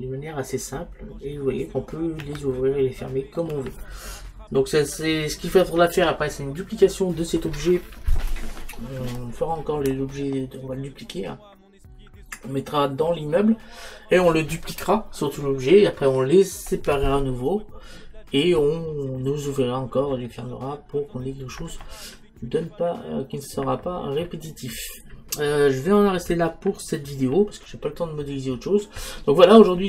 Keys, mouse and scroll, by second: 0.8-4.4 middle drag.